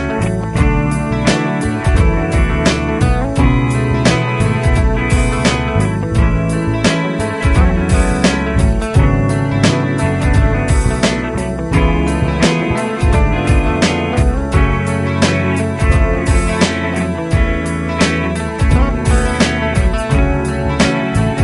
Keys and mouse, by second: 2.5 F2, 4.5 ctrl+click, 8.5 F3, 9.1 F3, 18.1 F2.